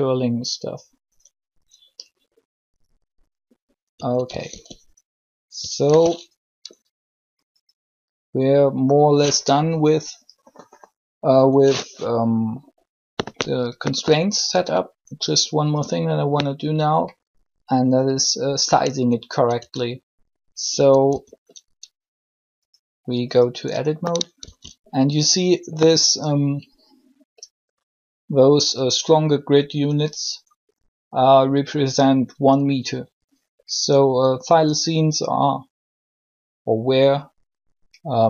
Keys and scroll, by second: 3.8 typing, 4.3 alt+r, 5.8 alt+g, 19.5 Tab, 20.6-21.0 typing, 24.4 shift+c.